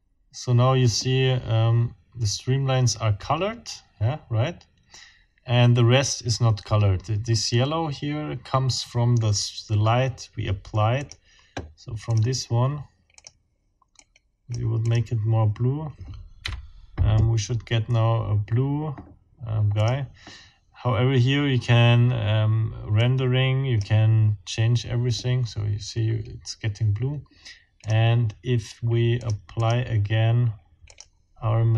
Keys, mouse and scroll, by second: 11.0 click, 12.1 click, 13.2 click, 13.9-14.7 scroll up 1, 14.9 scroll up 1, 16.4 F12, 19.7-20.1 scroll up 1, 23.0-24.0 scroll up 1, 27.8 click, 29.2 click, 29.5 click, 30.9 click.